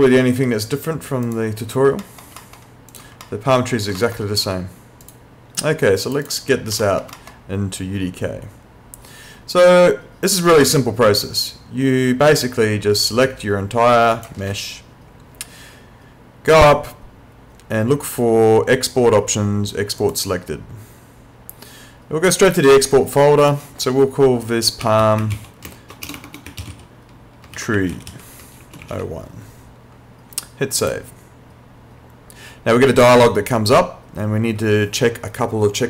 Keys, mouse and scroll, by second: 1.3 click, 2.0 alt+middle click, 2.9 click, 3.3 alt+middle click, 4.0 alt+middle click, 5.1 click, 6.9 alt+middle click, 13.1 click, 16.5 click, 20.0 click, 23.4 click, 24.8-28.9 typing, 30.8 click.